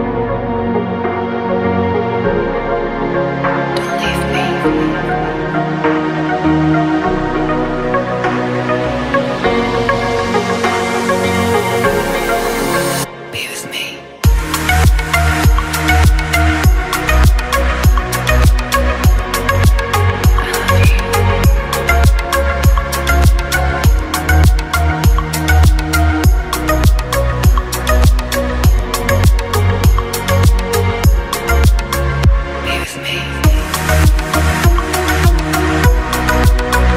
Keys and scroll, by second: 35.4-36.9 typing.